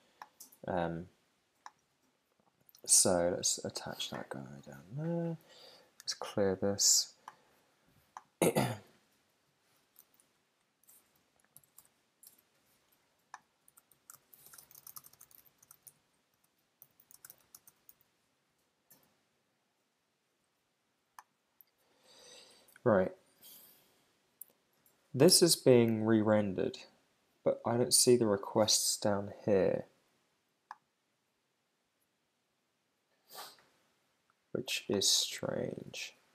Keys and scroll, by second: 8.8 Return, 11.6 shift+,, 14.4 shift+t.